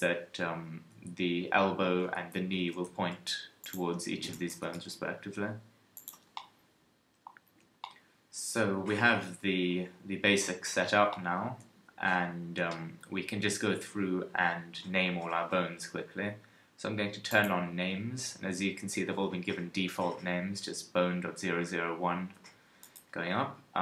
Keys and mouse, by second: 2.6 g, 4.3-6.3 drag, 4.5 g, 7.5 a, 9.3 KP_1, 17.3-22.8 drag, 22.8-23.8 right drag.